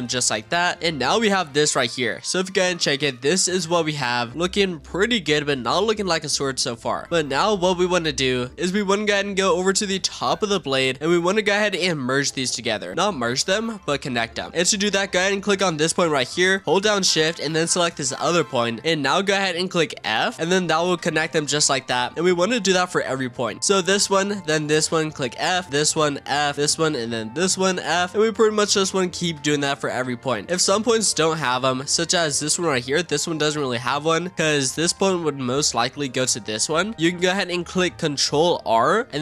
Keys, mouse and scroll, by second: 0.0 click, 0.3-0.8 scroll down 9, 0.8-4.8 shift+middle drag, 6.3 click, 7.1-8.5 scroll up 2, 8.5-10.1 shift+middle drag, 10.1-11.3 scroll up 9, 11.3-12.4 shift+middle drag, 12.4-13.6 scroll up 1, 15.8 click, 18.0 shift+click, 20.0 f, 20.3-23.5 shift+middle drag, 23.5 click, 24.5 shift+click, 25.3 f, 25.6 shift+click, 26.1 f, 26.5 click, 27.3 shift+click, 27.8 f, 28.1 scroll down 5, 28.5-30.5 shift+middle drag, 30.5-31.1 scroll up 1, 31.1-31.7 scroll up 3, 31.7-32.2 scroll down 2, 32.2 shift+middle click, 32.6-33.7 scroll up 2, 33.7 ctrl+z, 34.4 click, 34.8 click, 35.9 shift+click, 36.8 f, 36.9 click, 37.0-38.5 scroll up 1, 38.5 ctrl+r.